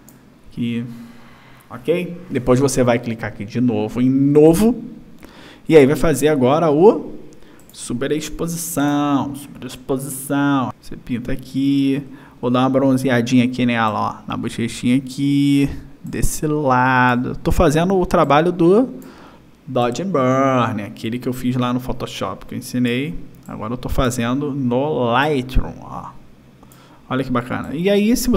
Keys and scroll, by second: 8.5 space, 10.9 o.